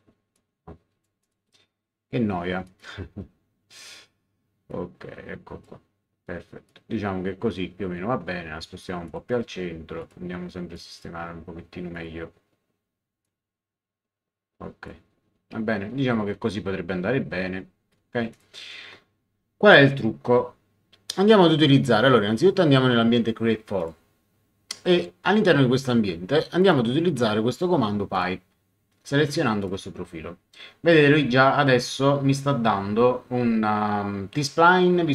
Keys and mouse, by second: 2.6 click, 4.7 click, 6.7 click, 9.0 click, 11.9 click, 13.2 click, 18.3 click, 23.8 click, 26.6 click, 28.1 click, 29.6 click.